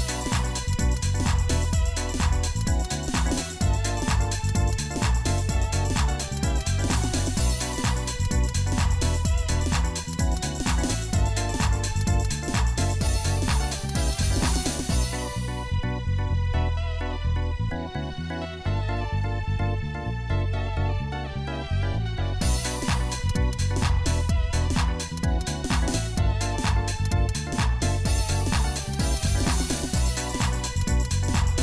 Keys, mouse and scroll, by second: 21.3 middle click, 22.4 click, 23.4 shift+middle click, 24.0 Tab, 24.9-25.3 scroll up 2, 25.5 ctrl+Tab, 28.7-29.7 shift+middle drag.